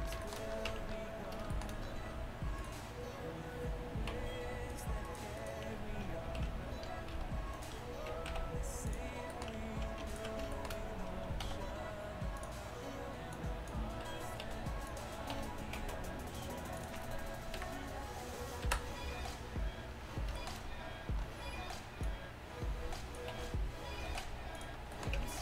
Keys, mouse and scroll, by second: 0.7 Tab, 4.0-7.4 right drag, 4.2 v, 6.3 ctrl+l, 7.2 c, 7.7 right click, 8.4 x, 11.5 w, 11.9 click, 13.4-15.4 drag, 14.5 s, 15.4 r, 17.6 KP_1, 18.7 KP_Decimal, 22.1-24.6 drag, 23.4 e, 25.2 Tab.